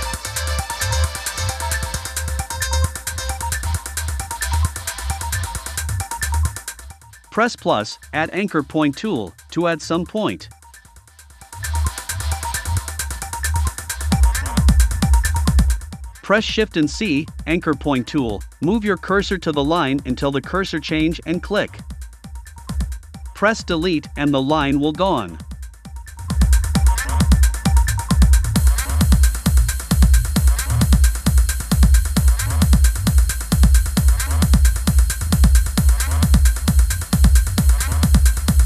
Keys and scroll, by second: 17.9 shift+c, 21.1 BackSpace, 25.5 BackSpace, 28.3 super+z, 30.8 BackSpace, 33.8 BackSpace, 36.0 BackSpace, 37.0 v.